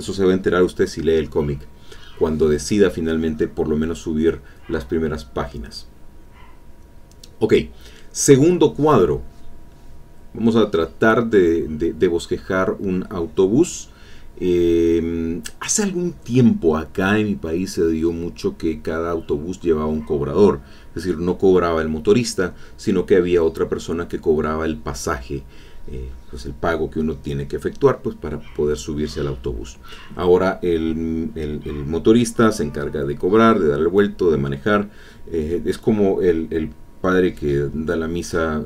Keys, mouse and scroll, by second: 0.1 alt+Tab, 1.4 click, 6.3 click, 9.8 click, 10.2 click, 10.5 click, 10.9 click, 11.2 click, 12.1 click, 16.0 alt+Tab, 18.5-20.9 drag, 26.1 alt+Tab, 27.9 alt+Tab, 31.1 alt+Tab, 32.5 click, 33.7-35.4 drag, 35.5 click, 36.4-38.6 drag.